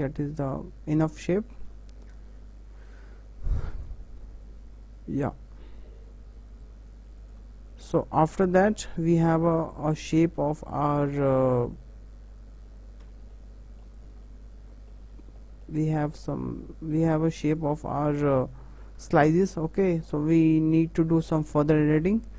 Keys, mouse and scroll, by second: 0.5-2.9 middle drag, 6.0 Tab, 6.5-8.7 right drag, 8.7-10.4 middle drag, 10.4 Tab, 10.8 middle click, 11.5 click, 13.0 Tab, 13.3-13.9 middle drag, 13.9 click, 14.2 middle click, 15.1 Tab, 15.4 middle click, 16.1 click, 17.8 click, 18.0 Tab, 18.3 middle click, 19.0 scroll down 3, 19.2-20.0 middle drag, 20.0-20.3 scroll up 3, 20.3-21.4 middle drag, 21.4-21.8 scroll up 2, 21.8-22.3 scroll down 3.